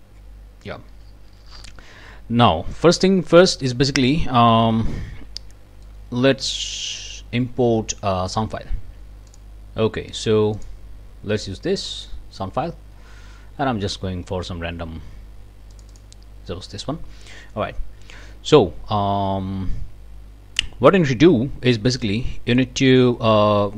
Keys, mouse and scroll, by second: 5.8 click, 9.3 click, 10.6 click, 11.9 click, 15.7 click, 21.0 scroll down 1, 21.6 scroll down 1, 22.0-22.8 drag.